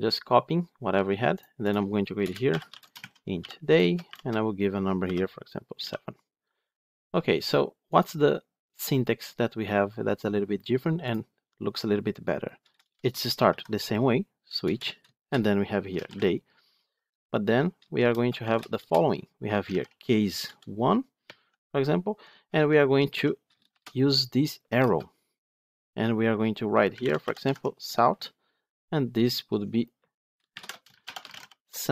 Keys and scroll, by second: 14.6 Return, 20.4 Return, 24.5 Return, 27.4 Tab.